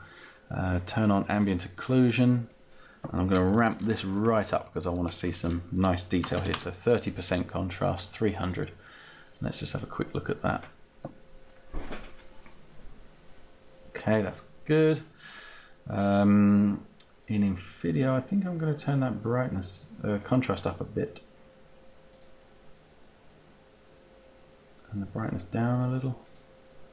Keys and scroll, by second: 3.3 3, 3.6 0, 3.8 Tab, 5.3 shift+Tab, 6.1 3, 6.5 Return, 7.2 Return.